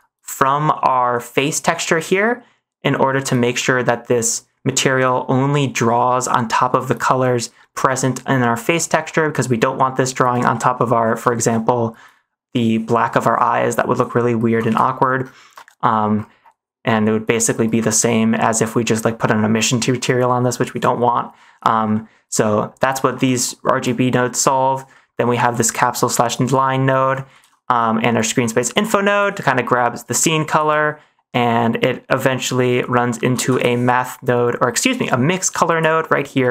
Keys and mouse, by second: 3.5 middle click, 5.2 middle click, 7.5 middle click, 9.0 middle click, 10.4 shift+middle drag, 11.4 middle click, 14.6 ctrl+s, 15.6 middle click, 21.8 middle click, 23.2 click, 23.7 click, 24.9 middle click, 25.4 click, 27.3 ctrl+s, 28.2-29.2 drag, 29.3 middle click, 30.0 click, 30.8 middle click, 32.4-33.4 drag, 35.0 click, 36.2 middle click.